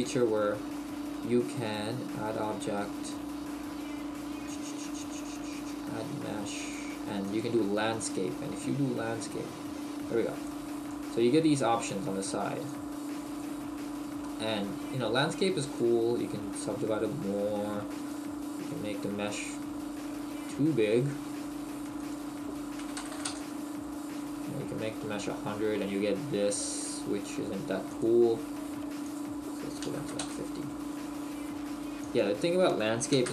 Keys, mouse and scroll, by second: 10.4 click, 10.9 click, 12.7 click, 14.2 middle click, 15.8 click, 18.1 click, 21.9 click, 25.1 scroll down 1, 25.7 middle click, 27.9 click, 32.0 click.